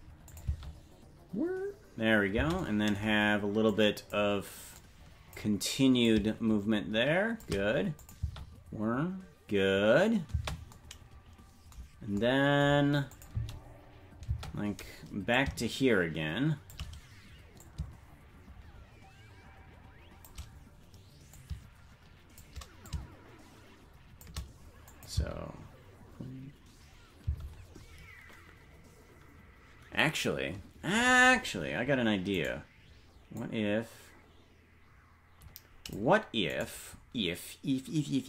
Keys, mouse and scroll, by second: 0.3 click, 0.4 space, 2.6 space, 3.7 click, 4.7 click, 6.0-7.5 drag, 8.0 click, 8.2 space, 10.3 space, 13.1 click, 13.3 space, 15.3-16.8 drag, 17.6-20.3 drag, 21.3-22.5 drag, 22.8-24.3 drag, 24.9 click, 25.1 space, 29.4 space, 32.3-33.3 right drag, 33.4-36.0 drag, 36.6 right click.